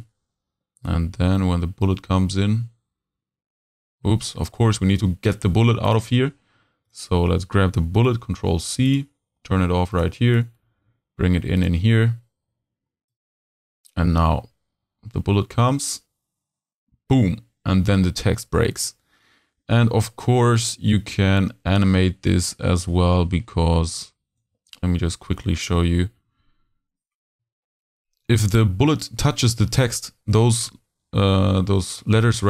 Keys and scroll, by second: 8.1 super+c, 10.8 super+v.